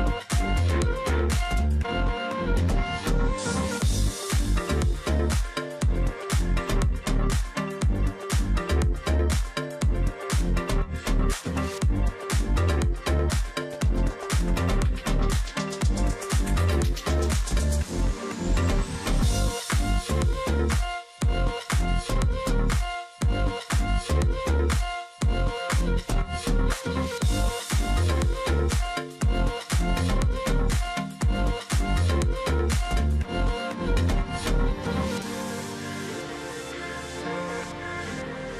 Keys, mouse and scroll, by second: 0.3 ctrl+click, 0.4 space, 1.7 space, 2.9-3.4 alt+scroll up 1, 4.5 ctrl+click, 5.8 ctrl+click, 8.7-9.3 alt+scroll down 1, 9.7-10.7 alt+scroll down 2, 9.9 ctrl+click, 11.2-11.5 alt+scroll up 1, 12.1-14.6 typing, 12.4 alt+scroll down 1, 13.0 alt+scroll up 1, 14.4 alt+scroll up 1, 15.4-15.9 alt+scroll down 1, 21.0 space, 23.9 alt+scroll down 1, 24.2 space, 24.6-25.1 alt+scroll up 1, 29.2 alt+scroll down 1, 29.9-30.2 alt+scroll up 1, 30.9-31.4 alt+scroll down 1, 31.6 space, 33.6 alt+scroll down 1, 33.8 space, 34.2 alt+scroll up 1.